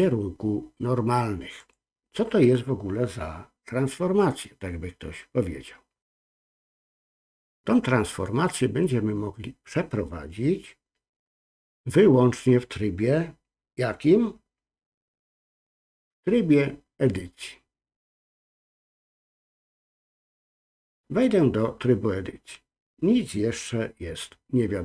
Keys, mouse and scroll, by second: 18.7-20.3 drag.